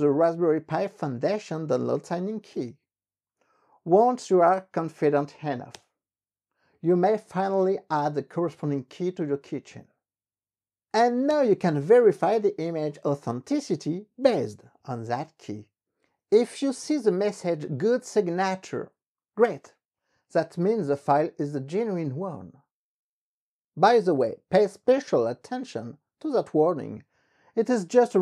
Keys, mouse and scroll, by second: 5.7 Return, 9.5 Up, 11.3 Return.